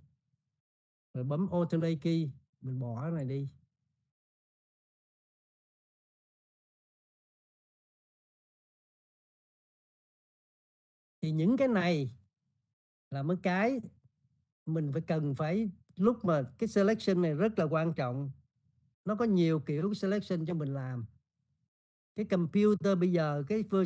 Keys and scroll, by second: 0.0-0.9 typing.